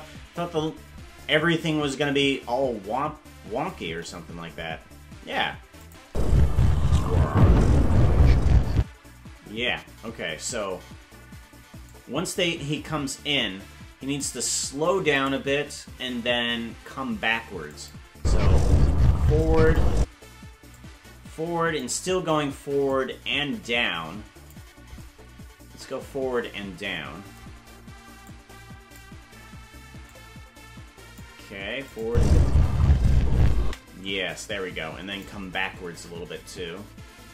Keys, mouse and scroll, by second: 3.8 KP_0, 5.8 click, 6.0 space, 8.8 space, 11.9-14.3 drag, 15.4 right click, 17.7 click, 18.1 space, 19.5 click, 20.0 space, 20.8-21.8 drag, 22.9-24.5 drag, 28.2 click, 30.0-31.2 drag, 31.9 click, 32.0 space, 33.7 space, 34.3 click.